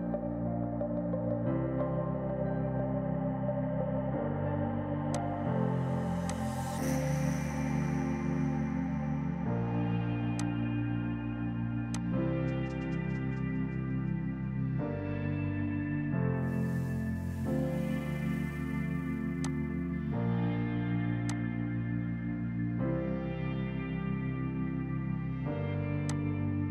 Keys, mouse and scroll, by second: 5.2 click, 10.4 click, 16.3-17.1 scroll up 1, 17.1 scroll down 1, 19.5 click, 26.1 click.